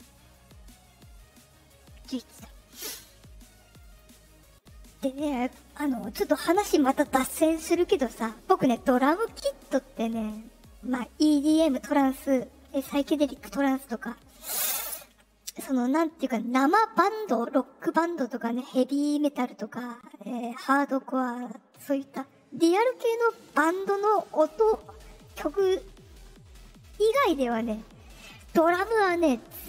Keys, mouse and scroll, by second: 3.7 click.